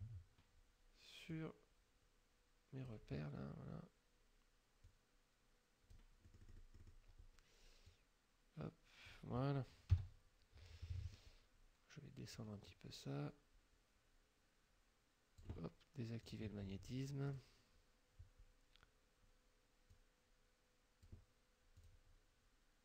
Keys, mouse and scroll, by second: 1.3-3.1 drag, 4.9-6.2 drag, 6.3 middle click, 8.0-9.3 drag, 10.0 KP_5, 10.9 click, 12.4-15.6 drag, 16.3 click, 17.3 click, 20.0-21.3 drag, 21.8 click.